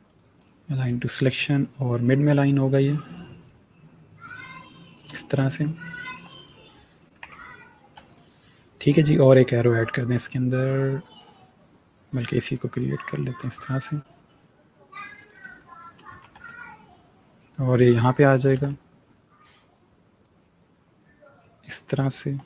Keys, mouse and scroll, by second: 2.3 click, 5.4-6.1 alt+scroll down 1, 6.1 scroll down 1, 6.3 click, 7.0 scroll up 1, 7.7 scroll down 1, 8.0 click, 11.0 click, 16.1 v, 17.3 click, 18.4 ctrl+z, 20.1 click, 21.8-22.3 alt+scroll up 1, 22.3-22.4 scroll up 3.